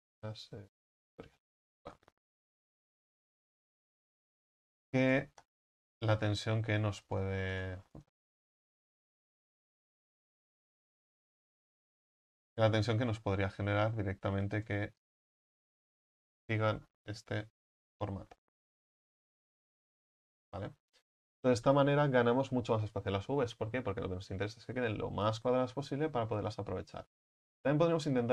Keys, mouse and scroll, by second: 1.9-4.1 right drag, 4.1 s, 4.7 right click, 5.9 s, 6.6-7.1 scroll up 1, 7.6 right click, 7.9 alt+shift+right click, 8.7 ctrl+z, 8.9 ctrl+z, 9.5 ctrl+z, 10.0 ctrl+z, 10.8 alt+shift+right click, 11.5 s, 12.9-15.1 right drag, 15.1 click, 16.0-19.5 right drag, 19.5 w, 28.2-28.3 right drag.